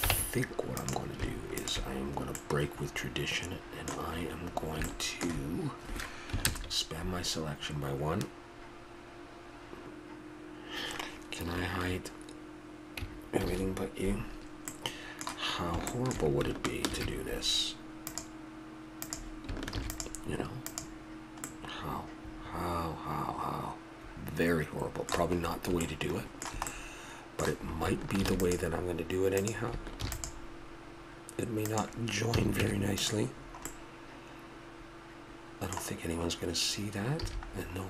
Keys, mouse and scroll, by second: 0.1 ctrl+Tab, 2.4 click, 3.0 middle click, 4.1 middle click, 4.9-7.2 middle drag, 6.5 ctrl+KP_Add, 13.4 shift+h, 14.7-16.0 middle drag, 17.0 ctrl+r, 19.7 ctrl+r, 21.5 click, 21.7 middle click, 21.9 middle click, 25.4 middle click, 28.2 ctrl+r, 28.5 click, 30.0 ctrl+r, 32.4 a, 32.6 Tab, 36.7-37.8 middle drag, 37.2 a.